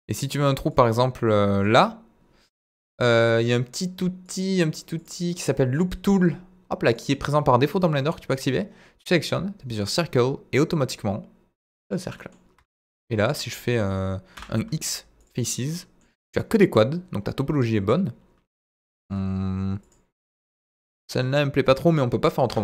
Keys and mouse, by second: 0.6 click, 4.2 click, 4.9 click, 6.0 click, 6.8 click, 9.7 click, 12.0 middle click, 12.5 Tab, 12.7 middle click, 12.9 Tab, 14.3 x, 15.5 middle click, 17.7 KP_7, 18.9 shift+middle click, 22.4 Tab.